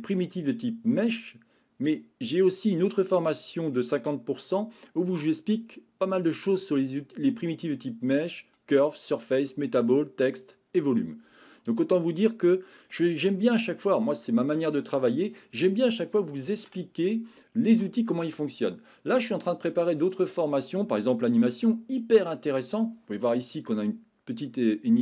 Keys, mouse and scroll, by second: 11.9-12.9 middle drag, 13.3-13.7 middle drag.